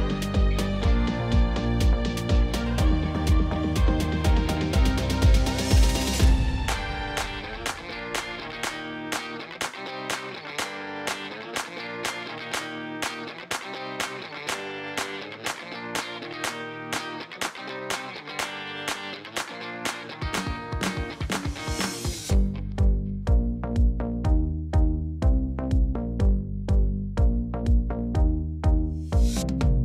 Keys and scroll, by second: 0.2 ctrl+r, 0.7 Return, 1.0 g, 1.1 z, 4.0 g, 5.4 g, 7.4 s, 7.9 ctrl+b, 10.5 ctrl+b, 17.4 3, 19.5 e, 29.2 x.